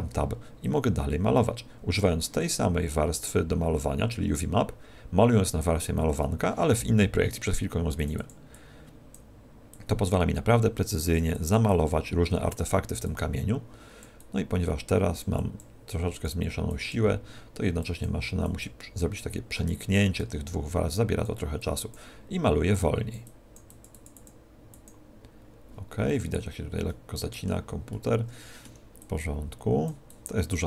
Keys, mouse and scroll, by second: 0.5 click, 7.5 click, 9.2 click, 10.0 click, 10.2 click, 12.1 click, 12.6 click, 16.1 click, 20.1-26.8 click, 26.8 middle click, 27.8 middle click, 28.9 click.